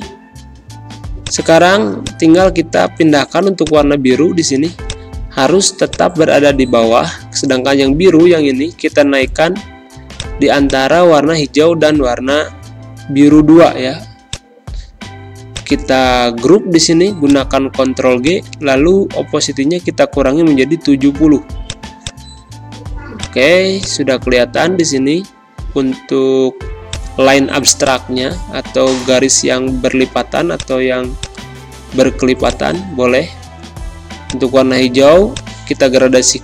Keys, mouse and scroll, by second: 0.3 ctrl+End, 1.2 click, 7.5 ctrl+], 10.1-19.4 drag, 19.4 7, 21.6 click, 22.7 z, 23.1 click, 23.4 space, 23.9 click, 24.0 space, 26.9 click.